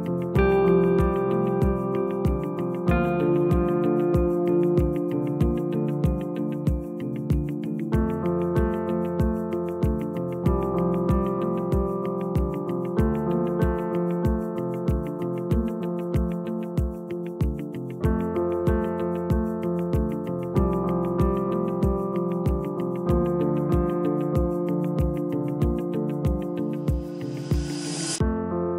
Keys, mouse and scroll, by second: 2.3 click, 2.8 s, 6.3 click, 7.4 s, 9.0 Tab, 10.7 click, 12.4 s, 15.1 click, 16.5-19.5 drag, 21.6 click, 22.5-24.2 right drag, 24.2 click, 24.9 Tab, 27.4-28.7 drag.